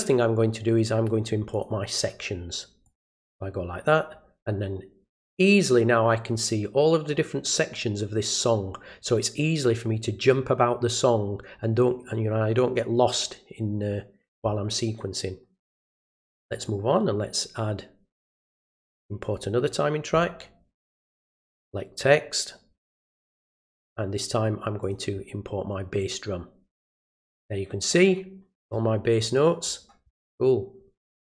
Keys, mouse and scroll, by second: 1.5 click, 2.8 click, 16.5 right click, 19.2 click, 21.3 click, 22.8 click, 24.8 click, 26.0 click, 29.3 click, 31.1 right click.